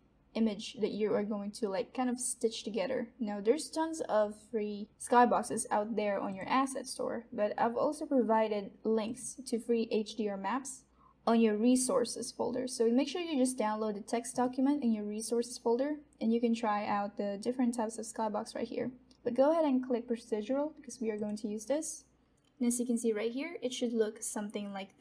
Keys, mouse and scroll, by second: 22.1 click.